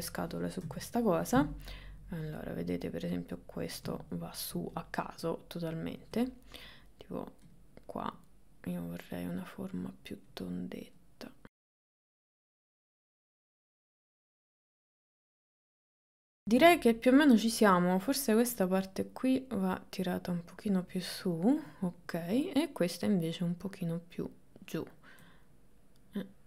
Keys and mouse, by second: 0.7 KP_1, 1.7 click, 2.6-3.8 drag, 4.0 shift+middle click, 8.2-9.4 drag, 11.0 click, 11.9 click, 12.6 shift+middle click, 12.7 middle click, 13.1 click, 13.3 click, 14.0 click, 14.2 click, 14.8 middle click, 15.1 ctrl+middle click, 15.6 KP_1, 15.8 KP_3, 16.4 middle click, 17.4 click, 18.7-20.8 drag, 22.3 click, 23.6-24.7 drag, 25.9 click.